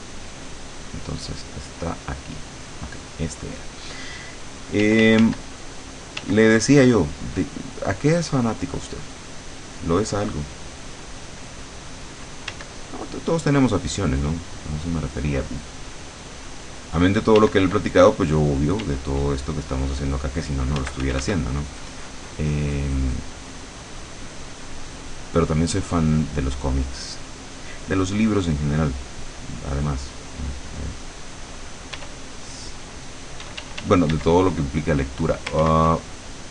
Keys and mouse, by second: 0.7 click, 1.1 click, 1.5 click, 2.7 click, 4.9 d, 6.1 click, 6.3 d, 6.9-12.0 drag, 12.6 d, 12.9-17.2 drag, 17.5 d, 18.0-20.0 drag, 18.9 d, 20.7 click, 20.9 f, 21.5-27.4 drag, 32.1 e, 33.5 d, 34.5 click, 35.7 ctrl+z.